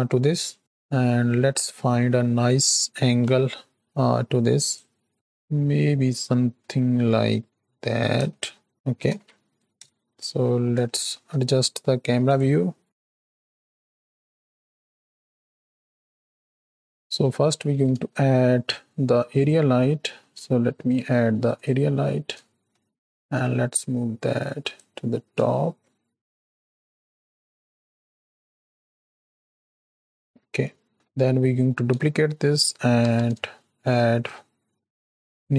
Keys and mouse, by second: 0.5 click, 1.6-2.3 middle drag, 3.1 KP_Decimal, 5.1-8.1 middle drag, 8.3-8.8 shift+middle drag, 9.6 ctrl+alt+KP_0, 10.0 n, 10.8 shift+middle click, 13.0 ctrl+middle click, 13.2 shift+middle click, 13.4 ctrl+middle click, 13.9-14.4 shift+middle drag, 14.7-15.2 ctrl+shift+middle drag, 15.3 z, 16.1 shift+middle click, 16.8 click, 16.9 n, 17.1 click, 17.6 shift+a, 22.4 shift+click, 23.8 click, 25.4 shift+middle click, 26.4 middle click, 26.9 click, 27.5 middle click, 27.8 click, 28.5 click, 29.1 click, 29.8 shift+middle click, 30.9 shift+middle drag, 31.4 middle click, 32.9 shift+d.